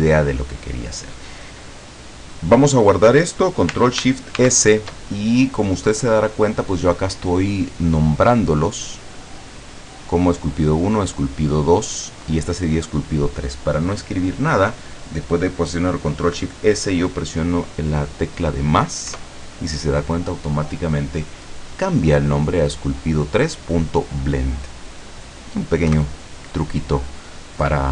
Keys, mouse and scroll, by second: 4.5 ctrl+shift+s, 19.1 KP_Add, 25.9 KP_Enter.